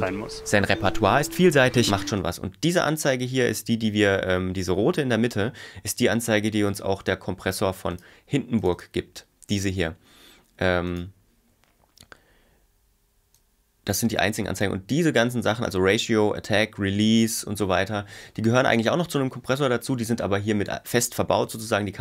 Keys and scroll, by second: 2.1 space.